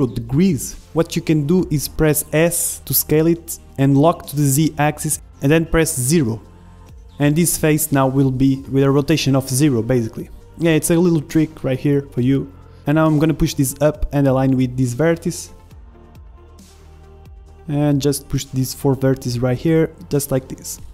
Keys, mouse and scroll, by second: 3.4 s, 8.8 r, 9.9-14.7 drag, 14.7-16.2 middle drag, 15.4-17.1 drag, 17.5 middle click, 17.6 click, 18.2 middle click, 19.1-20.1 drag, 19.1-20.9 typing, 19.5 ctrl+Tab.